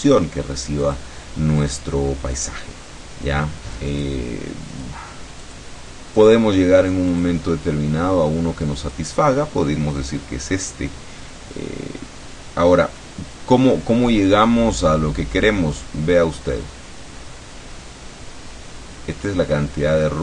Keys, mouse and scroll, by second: 0.8 click, 1.7 click, 2.4 click, 4.0 click, 4.8 click, 5.5 click, 6.3 click, 7.2 click, 8.9 click, 9.5-13.2 middle drag, 14.4-20.2 drag.